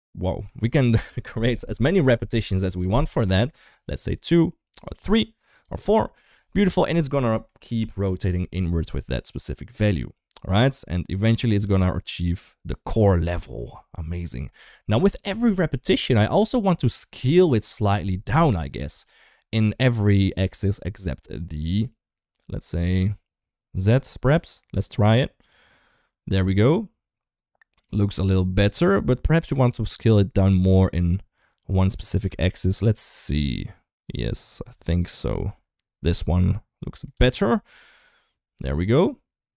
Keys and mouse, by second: 3.2 middle click, 5.3 click, 6.5 middle click, 9.4-13.2 drag, 13.6-14.5 middle drag, 16.2-17.5 middle drag, 24.2-29.5 shift+drag, 30.2-32.1 shift+drag, 32.4 ctrl+z, 32.8-36.9 shift+drag, 37.6-39.5 shift+drag.